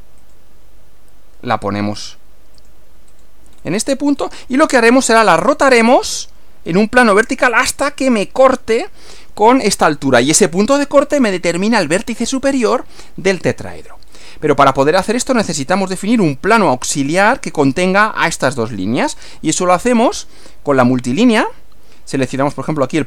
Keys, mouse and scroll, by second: 0.2 click, 2.6 click, 3.2 click, 3.6 scroll down 1, 4.2 scroll down 2, 14.0-14.4 scroll up 1, 15.8-16.8 middle drag, 20.4 click.